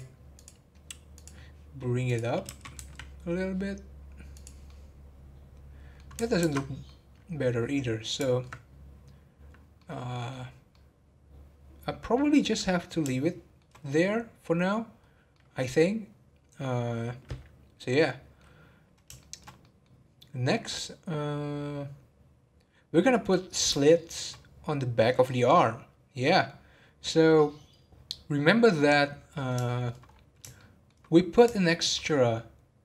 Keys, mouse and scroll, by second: 2.4 g, 4.6-6.4 middle drag, 6.4 ctrl+z, 6.8-10.5 middle drag, 10.5 scroll up 3, 10.7-12.3 middle drag, 12.3 scroll down 1, 13.2-14.9 shift+middle drag, 14.9 scroll up 4, 15.3-18.4 middle drag, 18.4 scroll down 2, 19.1-20.8 shift+middle drag, 20.8-22.4 scroll up 1, 23.8-27.8 shift+middle drag, 27.8-29.0 scroll down 10, 29.0-30.0 middle drag, 30.0 scroll up 1, 30.5-31.1 shift+middle drag, 31.1 scroll up 1, 31.5-32.8 shift+middle drag.